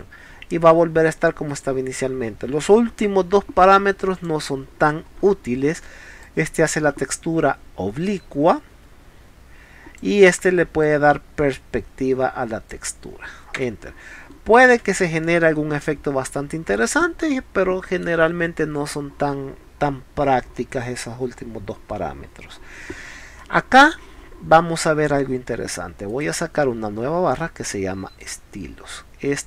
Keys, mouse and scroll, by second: 1.5 right click, 4.2 click, 5.3 scroll up 2, 6.2 click, 10.8-12.7 drag, 14.2 middle drag, 14.9 click, 14.9 space, 15.2-16.8 middle drag, 20.6-20.9 middle drag, 23.4-23.8 middle drag, 24.2 scroll down 1, 24.9 scroll up 1, 26.1 right click, 28.2 click.